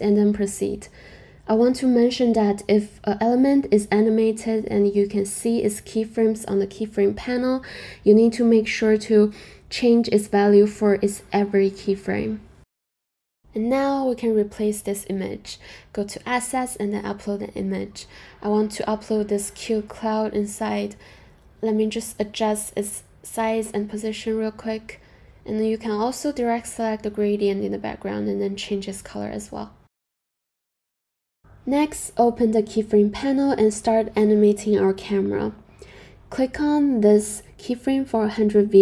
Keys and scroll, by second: 0.0-0.7 typing, 21.9-23.6 typing.